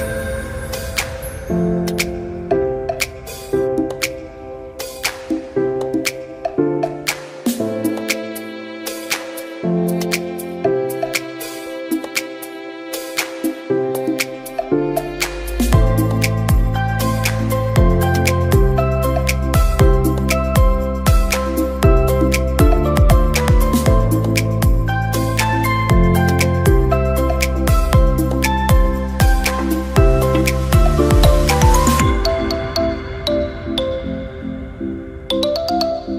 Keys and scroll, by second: 7.1 alt+Num_Lock.